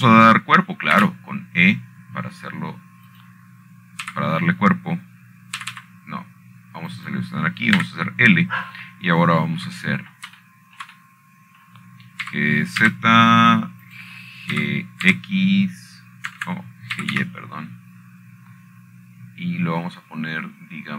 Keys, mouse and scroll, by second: 1.0 click, 3.7 e, 5.8 click, 6.8 typing, 8.3 typing, 9.6 click, 10.5 typing, 12.9 shift+middle click, 13.6 shift+middle click, 14.4 middle click, 15.0 g, 15.5 z, 16.6 click, 17.2 click, 17.3 g, 17.8 x, 19.0 Escape, 19.7 g, 19.9 y.